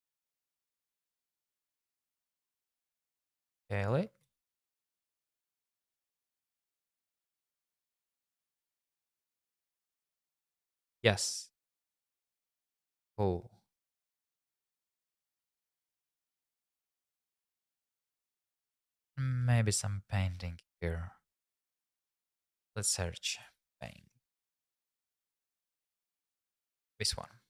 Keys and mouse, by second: 1.1-3.0 typing, 3.8 click, 4.2 click, 4.2 g, 4.3 z, 4.6 click, 4.9 click, 6.5 click, 7.1 shift+z, 8.0 shift+z, 8.3 g, 8.5 x, 9.3 click, 10.9 click, 11.6 click, 14.2 middle click, 15.0 middle click, 17.1 click, 17.5 shift+click, 20.3 middle click, 22.5-25.3 drag.